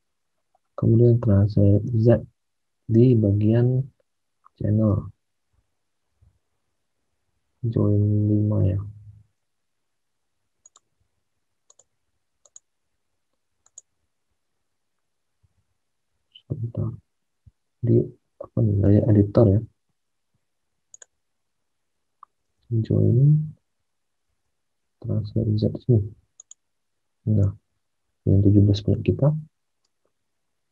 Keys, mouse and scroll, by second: 1.9 alt+Tab, 3.1 alt+Tab, 3.5 alt+Tab, 6.1 alt+Tab, 15.5 alt+Tab, 18.8 alt+Tab, 22.6 alt+Tab, 24.2 alt+Tab, 29.6 alt+Tab.